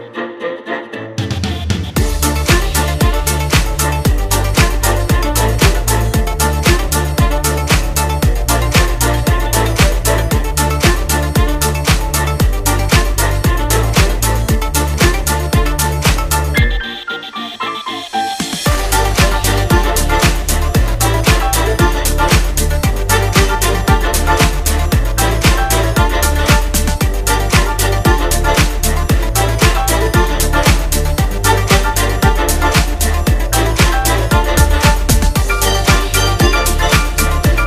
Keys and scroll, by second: 3.2 space, 28.3 space, 28.5 space, 30.6 ctrl+', 30.8 space, 32.1 space, 32.7 space, 33.2 space, 35.1 space, 36.3 space, 36.9 space, 37.2 space.